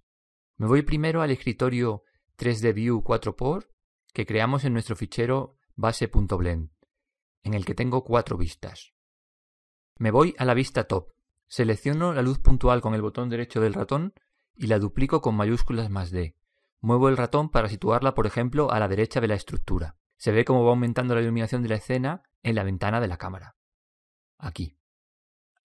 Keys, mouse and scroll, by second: 11.0-14.1 middle drag, 16.5 shift+d.